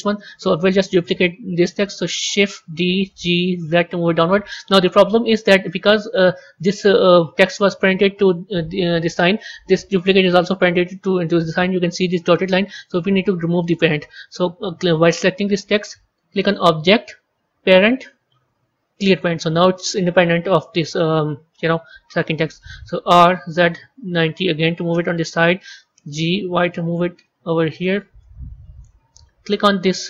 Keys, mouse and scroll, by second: 2.6 shift+d, 5.0-5.5 scroll up 2, 5.5-8.6 middle drag, 16.3-19.3 drag, 22.9 r, 25.8 g, 28.1-29.3 middle drag, 29.3 click.